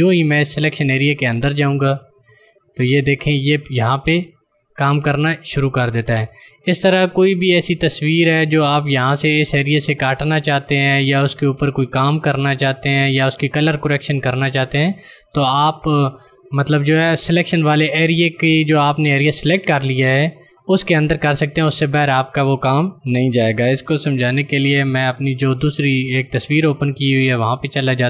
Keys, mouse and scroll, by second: 24.1 ctrl+alt+z, 26.4 click.